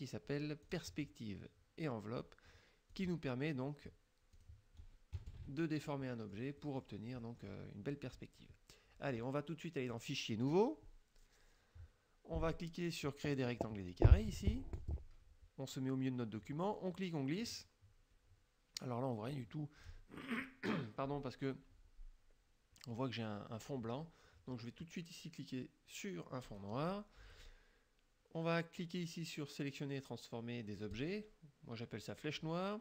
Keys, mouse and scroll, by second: 0.7 click, 3.0 click, 4.4 click, 5.2 KP_Subtract, 6.2 middle click, 6.7 middle click, 7.3 middle click, 10.0 click, 10.5 click, 14.8 click, 16.8-19.6 drag, 26.5 click, 31.0 click.